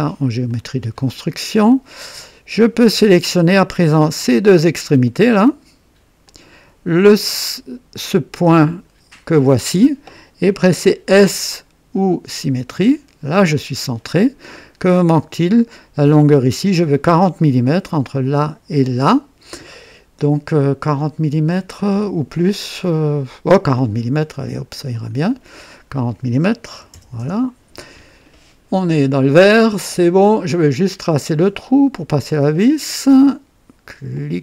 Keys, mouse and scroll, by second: 0.5 click, 1.6 right click, 2.6 right click, 4.4 click, 6.2 click, 8.6 click, 12.4 s, 16.3 click, 24.9 click, 26.7 KP_4, 27.1 KP_0, 27.2 KP_Enter, 28.8 scroll up 1, 29.3 right click, 30.8 click, 32.6 click, 34.1 click.